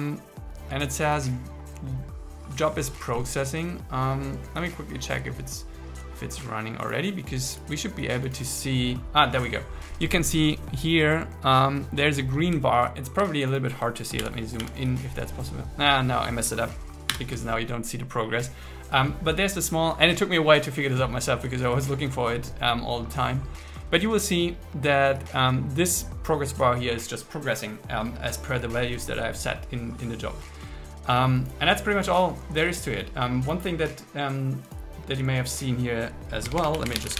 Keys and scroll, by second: 14.2 super++, 17.2 super+o.